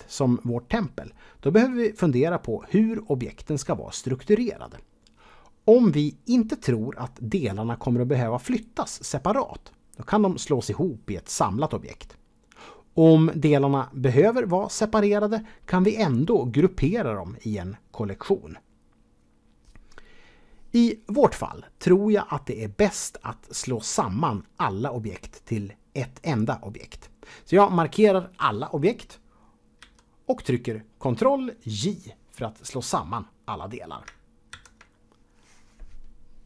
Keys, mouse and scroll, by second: 29.8 a, 34.5 ctrl+j.